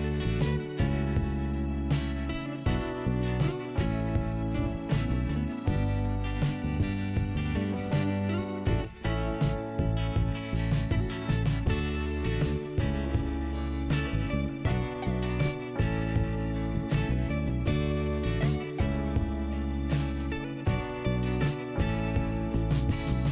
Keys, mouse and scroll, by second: 0.9 click, 2.6 scroll up 1, 3.4 k, 4.5-6.4 scroll up 2, 6.8 click, 8.9 click, 11.6-12.1 scroll down 2, 12.1 click, 12.1 scroll down 1, 12.3 click, 15.6 click, 17.5 click, 18.6 click, 19.5 Delete, 21.3 click, 21.9 click.